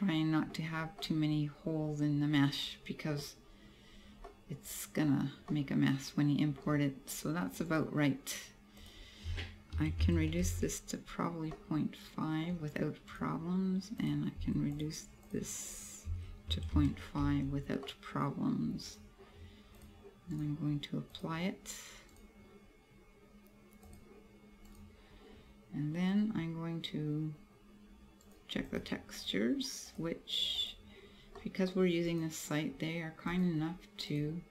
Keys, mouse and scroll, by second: 1.1 middle click, 3.4-3.9 scroll up 2, 3.9 scroll down 2, 4.3 middle click, 5.2-5.5 scroll down 1, 5.5 middle click, 7.2 scroll up 2, 7.8 right click, 8.9 click, 11.1 scroll down 2, 11.6 middle click, 13.2 right click, 14.1 click, 14.8 click, 15.3 click, 15.7 click, 19.0 right click, 19.8 click, 20.4 right click, 21.1 click, 22.2 right click, 23.9 click, 24.7 right click, 28.2 right click, 30.0 click, 31.3 scroll up 1, 31.4 middle click, 31.7 scroll down 1, 32.2 right click, 33.4 click.